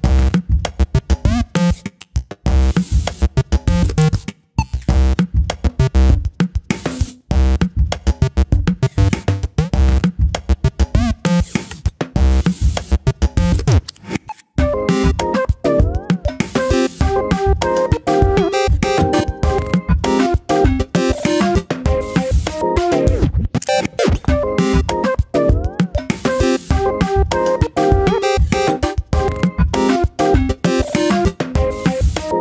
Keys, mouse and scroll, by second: 1.2 r, 3.6 click, 4.2 click, 4.5 click, 5.2 click, 6.4 scroll down 1, 6.5 middle click, 7.1 KP_7, 7.4-8.1 scroll up 2, 8.3 s, 9.0-9.5 scroll up 1, 9.5 shift+middle click, 9.6-11.3 drag, 12.2 scroll up 2, 12.3 shift+middle click, 12.7 click, 13.5 click, 13.7 alt+/, 14.0 click, 15.2 click, 17.1 alt+/, 17.2 scroll down 3, 17.3 middle click, 17.7 click, 17.8 scroll down 5, 18.0 middle click, 18.7 Tab, 18.9 click, 19.1 scroll down 1, 19.3 middle click, 20.2-20.6 scroll up 4, 20.6-21.0 shift+middle drag, 21.0 click, 21.4 Tab, 21.6 scroll up 1, 21.9 middle click, 22.1-22.6 scroll up 2, 22.6 click, 23.2 shift+s, 24.3 Tab, 24.8-25.2 scroll down 1, 25.2 click, 27.3 Tab, 28.1-29.1 drag, 29.9-30.9 drag, 31.7-32.4 scroll down 5.